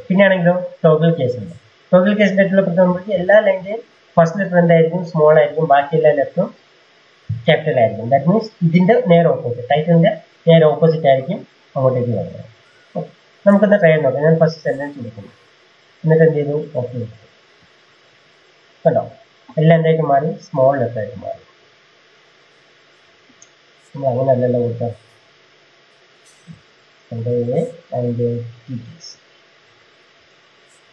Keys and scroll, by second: 26.5 ctrl+a, 28.0 typing, 29.9 ctrl+z, 30.4 Escape.